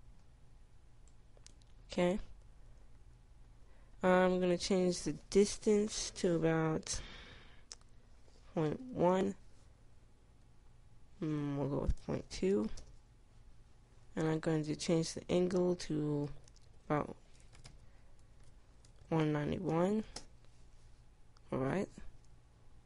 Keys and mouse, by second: 13.0 click, 20.2 BackSpace.